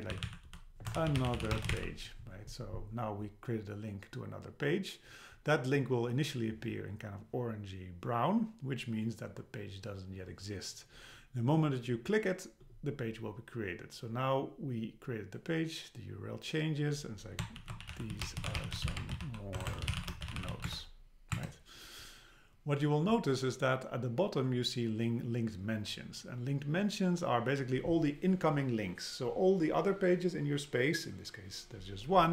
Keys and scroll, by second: 0.9 BackSpace, 19.6 BackSpace, 20.7 Return.